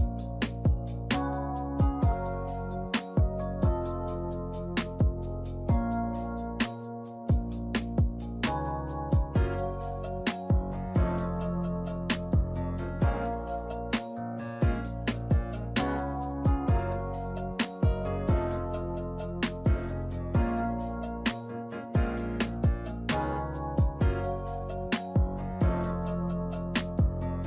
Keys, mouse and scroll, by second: 0.0 shift+right click, 0.1 shift+middle click, 0.6 shift+right click, 0.7 shift+middle click, 1.6 ctrl+b, 5.0 Tab, 5.7 r, 7.3 shift+middle click, 8.5 ctrl+a, 11.3 click, 12.0 click, 13.4 click, 16.1 click, 18.3 click, 19.8 click, 20.3 click, 23.2 click, 24.0 click, 25.1 w.